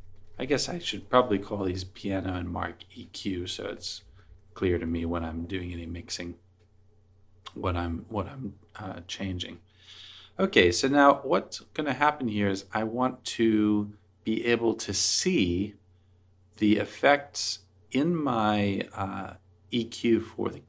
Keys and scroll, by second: 0.0-2.5 typing, 5.2-6.2 typing, 6.2 Return.